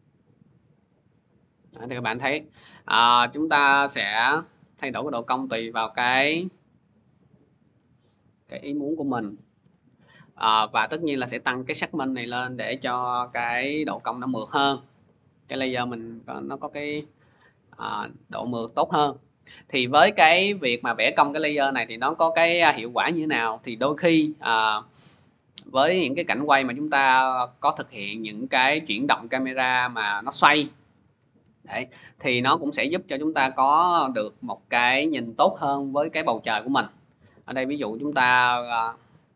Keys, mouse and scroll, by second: 1.4 scroll, 4.2 click, 7.6 click, 9.0-9.4 typing, 10.0 click, 12.6-18.5 typing, 17.1 scroll, 18.5 scroll, 20.2 click, 21.4 scroll, 24.7 click, 25.2 scroll, 28.8-29.1 scroll, 29.5 scroll, 29.6 click, 30.7 r.